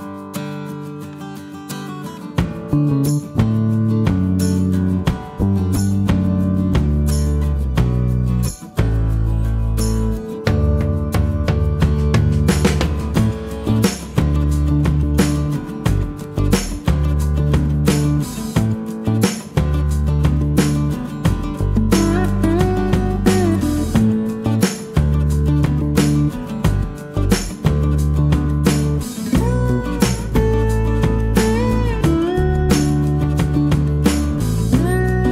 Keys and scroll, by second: 6.8 space, 7.1 Escape.